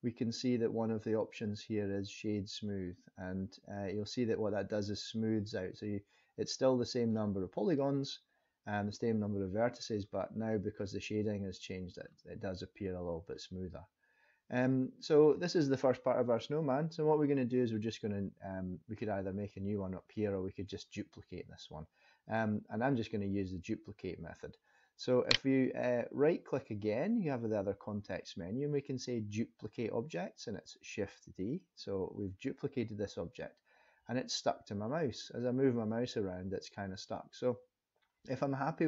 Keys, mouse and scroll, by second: 6.1-7.1 scroll up 3, 7.1 middle click, 9.9 scroll down 3, 10.9 middle click, 15.1-18.2 scroll down 1, 25.2 right click.